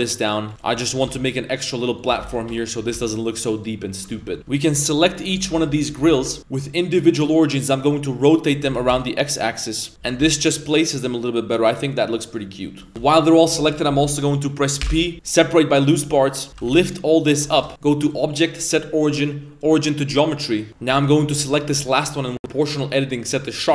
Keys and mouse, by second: 0.5 right click, 0.5 g, 0.5 1, 0.6 middle click, 1.0 g, 2.2 Tab, 2.4 shift+middle drag, 2.6 middle drag, 2.8 a, 3.1 right click, 3.3 middle drag, 3.6 right click, 3.8 middle drag, 4.2 Tab, 4.4 Tab, 4.4 ctrl+z, 5.0 l, 5.2 l, 6.7-7.6 drag, 7.8 middle click, 8.1 middle click, 8.4 middle click, 8.7 r, 11.1-12.8 middle drag, 13.0 g, 14.8 p, 16.5 ctrl+z, 16.6 g, 17.7 shift+middle click, 18.0-19.7 drag, 20.6 right click, 22.7-23.7 drag.